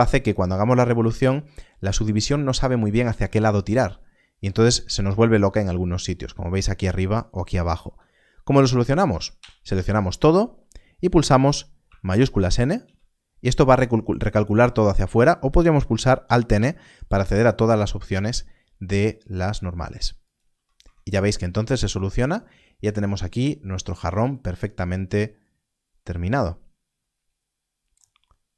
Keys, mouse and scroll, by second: 7.7 Tab, 9.0 a, 9.3 a, 9.6 a, 12.8 shift+n, 16.4 alt+n, 20.2 click, 20.7 Tab.